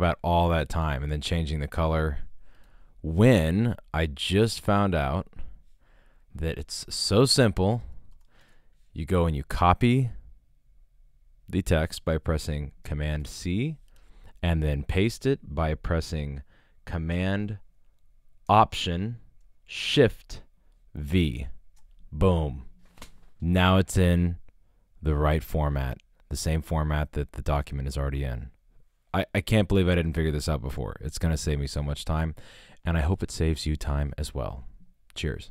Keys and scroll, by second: 4.4 super+z, 6.8 BackSpace, 7.8 Return, 8.4 super+Return, 8.5 super+Tab, 13.2 super+c, 21.1 alt+shift+super+v, 33.8 super+Tab, 34.7 shift+super+Tab.